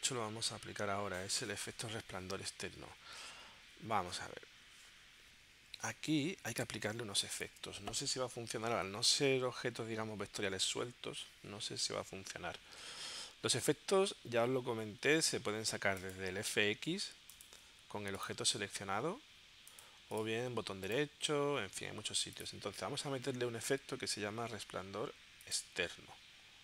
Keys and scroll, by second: 7.0 space.